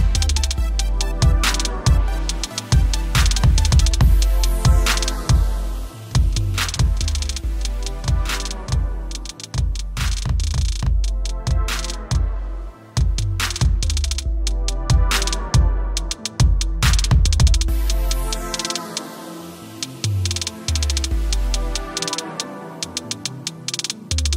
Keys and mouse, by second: 0.0 right click, 1.4 click, 14.1 click, 18.4 click, 22.8 click.